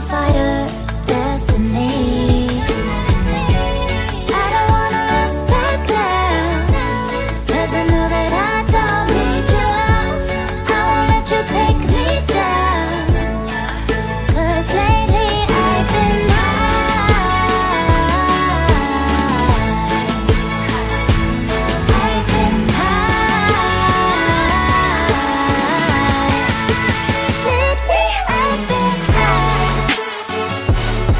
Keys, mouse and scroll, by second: 0.8 ctrl+z, 1.3-1.8 scroll up 1, 1.9 ctrl+t, 2.3 Right, 2.9 Left, 4.4 ctrl+j, 4.6 Right, 6.3 Return, 6.5 ctrl+j, 6.8 Right, 9.2 Return, 9.4 ctrl+j, 9.6 Right, 10.0 Right, 10.3 Right, 10.6 Right, 11.3 Return, 11.7 shift+click, 12.1 ctrl+g, 13.0 ctrl+j, 13.5 Right, 17.0 alt+scroll down 1, 17.5 alt+scroll up 1, 17.6 alt+scroll down 1, 17.7 alt+scroll up 1, 17.8 alt+scroll down 1, 18.9 double click, 19.5-19.8 scroll down 1, 19.8 double click, 23.5 double click, 24.9 alt+scroll down 1, 28.2 alt+scroll down 2, 28.3 alt+scroll up 1.